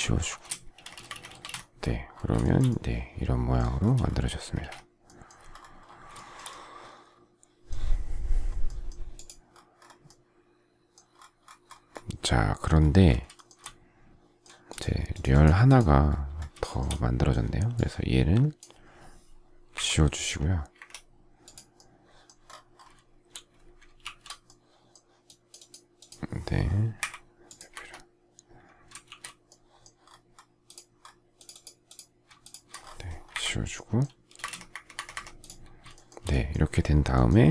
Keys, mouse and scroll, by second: 0.4 space, 0.7 Escape, 0.9 space, 1.0 Escape, 2.4 shift+middle click, 4.2 space, 4.5 Escape, 6.1 shift+middle click, 13.3 shift+middle click, 16.5 shift+middle click, 19.7 Delete, 20.7 Escape, 23.9 shift+c, 26.9 Delete, 27.7 Escape, 29.0 shift+c, 32.4 shift+click, 33.3 Delete, 34.2 space, 34.3 Escape, 35.9 shift+middle click.